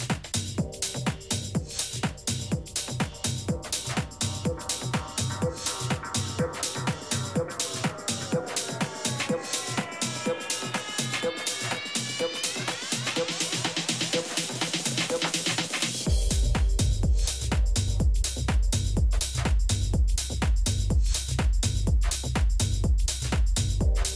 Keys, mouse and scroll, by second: 5.5 middle click, 6.7 z, 6.8 middle click, 7.6-9.4 middle drag, 11.2-13.7 middle drag, 18.7-20.6 middle drag.